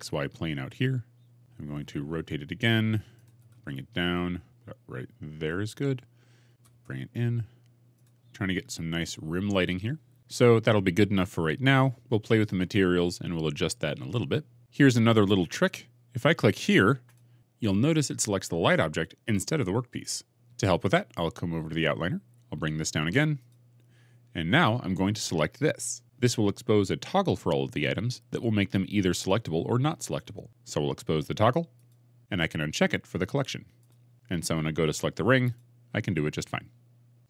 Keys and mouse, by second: 1.5 r, 2.1 z, 3.3 g, 3.4 z, 6.3 g, 6.6 shift+z, 7.8 click, 17.0 click, 20.3 ctrl+z, 23.3-32.2 drag, 33.7 click, 35.3 click.